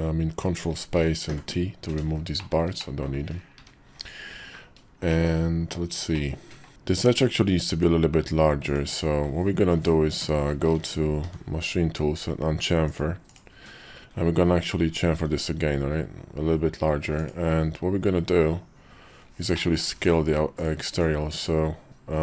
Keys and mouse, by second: 1.0 t, 2.2 shift+middle click, 2.5 middle click, 3.3 `, 4.0 KP_5, 4.8 shift+middle click, 5.9 middle click, 7.5 Tab, 8.6 Tab, 11.0 y, 14.9 ctrl+b, 19.4 middle click, 19.8 Tab, 20.3 alt+click.